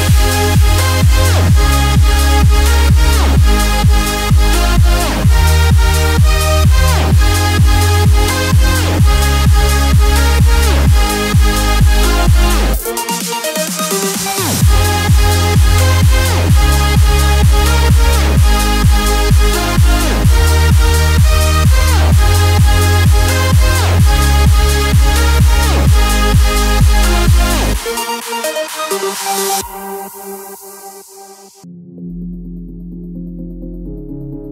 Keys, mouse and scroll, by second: 2.3 typing, 12.9 space, 16.9-26.9 drag, 23.0 typing, 27.4-34.5 drag, 27.4 typing.